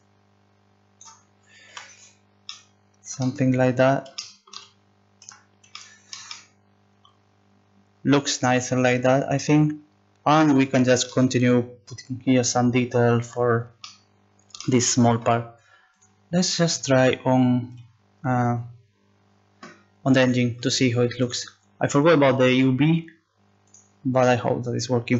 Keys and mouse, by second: 1.7 z, 5.3 Tab.